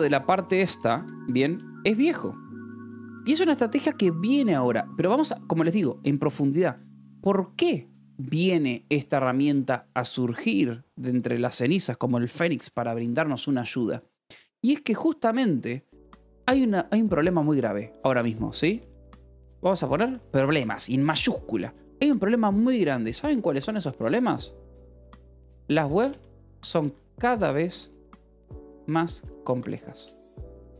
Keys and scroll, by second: 0.6 l, 2.0 c, 2.3 Escape, 3.1 k, 16.4-20.9 typing, 24.4-30.7 typing.